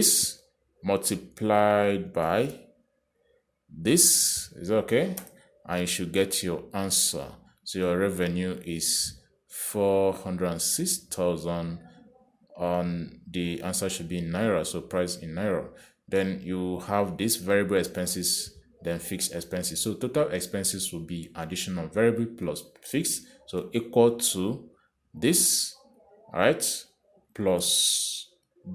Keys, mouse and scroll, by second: 1.2 click, 3.5 shift+8, 5.5 click, 6.4 Return, 7.9 click, 21.0 click, 24.7 =, 26.5 click, 28.6 shift+=.